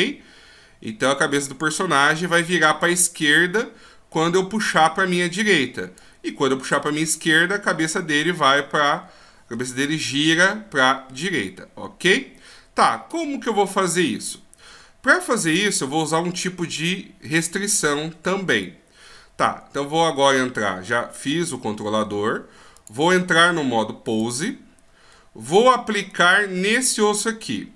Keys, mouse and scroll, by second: 7.9 middle click, 9.6 middle click, 11.1 middle click, 22.7 click, 24.2 click, 25.1 middle click, 26.1 right click.